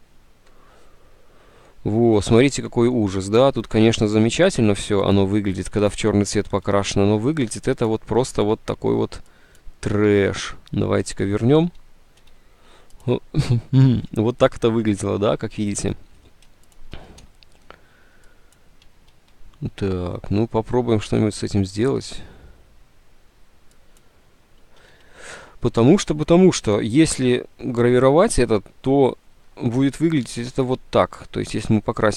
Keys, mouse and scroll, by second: 4.2 ctrl+u, 6.7 ctrl+z, 8.6 ctrl+z, 10.4 ctrl+z, 11.1 ctrl+z, 11.8 ctrl+z, 12.3 ctrl+z, 17.3 d, 19.1 ctrl+z, 24.9 ctrl+z.